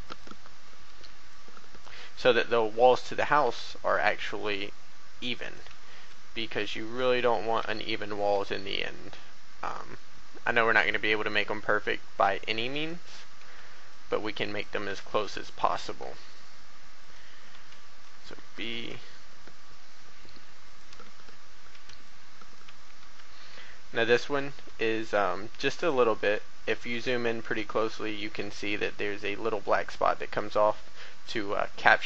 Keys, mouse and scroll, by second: 0.0 click, 0.5 a, 0.8 b, 3.4 e, 3.8 x, 5.4-7.4 drag, 7.6 e, 8.3 y, 12.7 click, 13.3 click, 13.3 a, 13.4 b, 13.8-15.5 drag, 15.5 e, 15.5 x, 16.0 y, 17.0 click, 17.3 a, 17.5 b, 18.4 e, 18.7 x, 20.8 click, 21.1 a, 21.7 b, 23.0 e, 24.4 x, 25.8 click, 26.5-26.9 scroll up 1, 27.0 shift+middle click, 28.7 a.